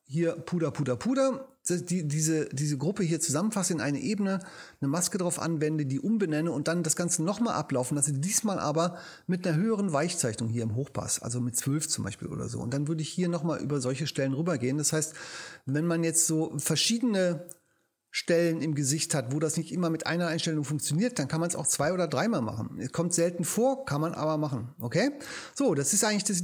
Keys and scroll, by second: 25.3 space.